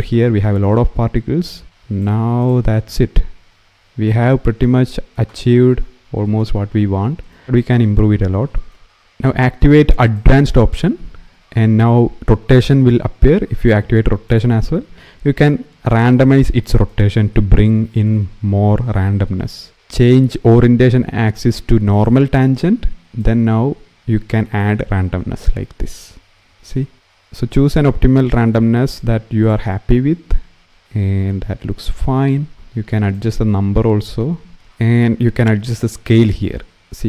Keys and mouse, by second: 7.1 shift+middle click, 9.9 click, 13.3 click, 14.1 click, 19.5-21.8 drag, 19.7 ctrl+z, 23.0-28.7 drag, 33.0-34.5 drag, 36.2-37.0 drag.